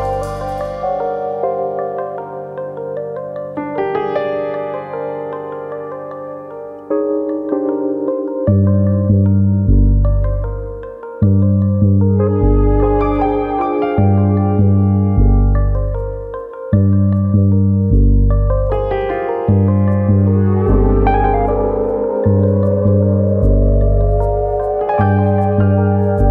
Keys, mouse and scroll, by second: 0.0 middle click, 0.7 g, 1.7 click, 1.8 middle click, 2.7 click, 3.2 shift+click, 3.9 g, 4.5 click, 4.7 middle click, 5.4 middle click, 6.0 click, 6.3 middle click, 6.8 g, 8.0 click, 8.3 middle click, 9.2-10.4 scroll down 3, 9.6 middle click, 11.3-11.8 scroll up 1, 11.8 middle click, 11.8-12.1 scroll up 1, 12.5 click, 14.8 m, 15.7 click, 15.9 m, 16.8 click, 17.1 m, 18.1 middle click, 19.2 middle click, 19.5 ctrl+z, 19.6 ctrl+z, 20.5 middle click, 21.1 Tab, 21.5 middle click, 21.9 middle click, 22.2-22.7 scroll up 2, 22.4 Tab, 22.7 middle click, 23.4 alt+click, 23.8 middle click, 24.3 click, 25.7 alt+click, 26.2 click.